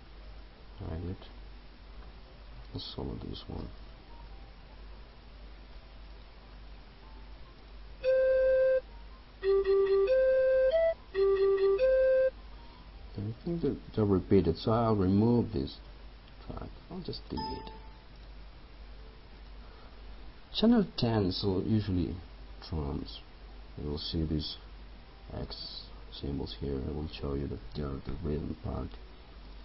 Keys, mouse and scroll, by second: 0.1 Up, 1.2 Down, 3.9 ctrl+click, 6.2 ctrl+click, 7.7 click, 14.8 right click, 17.2 click.